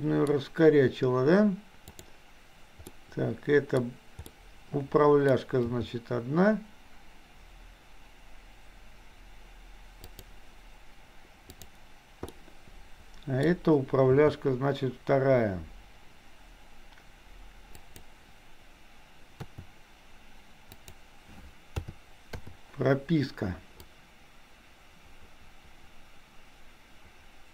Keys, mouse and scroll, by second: 1.9 click, 3.0-3.8 middle drag, 4.3-5.4 middle drag, 5.8 g, 12.3-13.5 middle drag, 14.1 g, 19.6 r, 21.8 a, 22.5 i, 23.9-27.5 drag.